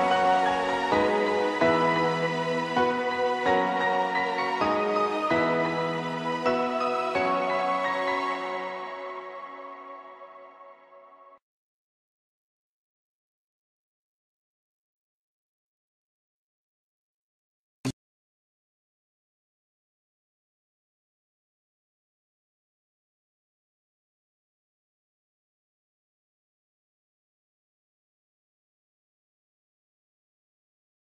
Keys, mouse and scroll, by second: 0.0 click, 1.5 KP_1, 2.4-2.9 scroll up 2, 2.9-3.7 shift+middle drag, 3.7 scroll up 3, 5.0 shift+d, 9.8 click, 10.1-10.5 scroll down 1, 10.5-11.4 middle drag, 11.4 scroll down 5, 11.8-14.1 shift+middle drag, 14.1 shift+z, 21.2-23.6 middle drag, 23.6 scroll down 1, 23.8-31.1 middle drag.